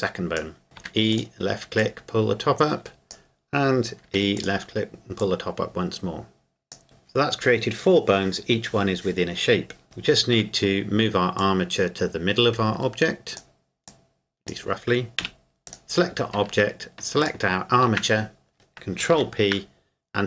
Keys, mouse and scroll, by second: 0.8 e, 1.1 click, 4.0 e, 4.4 click, 9.8 KP_7, 10.4 Tab, 11.4 click, 15.2 KP_1, 15.7 right click, 17.2 shift+right click, 19.1 ctrl+p.